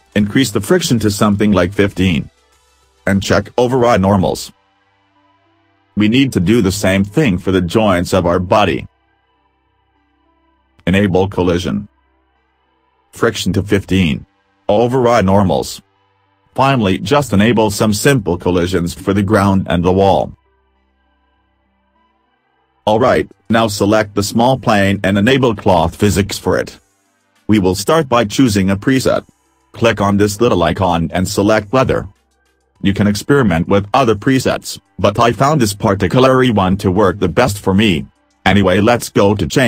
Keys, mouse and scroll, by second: 5.2 click, 6.8 click, 7.4 scroll up 2, 8.0 middle click, 9.2-9.7 scroll down 2, 9.7 middle click, 11.1 click, 11.8-12.6 scroll down 8, 13.1 click, 14.0 w, 15.1 click, 16.2 click, 17.4 click, 18.5 click, 19.9 click, 23.9 click, 26.6 click.